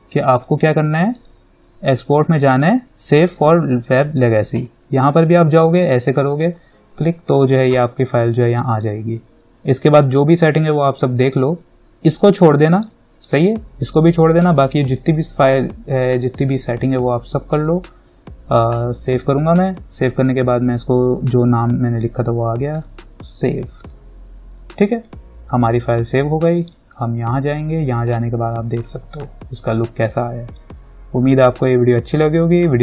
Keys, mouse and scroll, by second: 0.5 click, 4.7 click, 8.2-12.3 drag, 18.9 click, 22.9 click, 26.8 click.